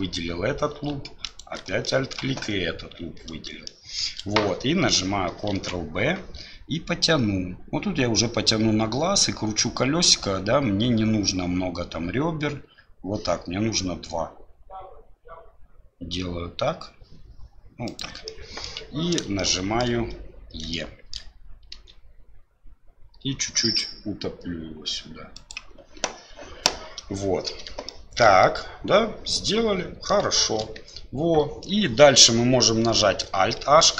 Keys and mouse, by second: 1.8 shift+click, 3.7 shift+click, 5.5 ctrl+b, 18.4 click, 19.5 shift+click, 19.8 middle click, 20.8 shift+middle click, 28.0 shift+middle click, 28.5-30.2 middle drag, 30.4 shift+middle click.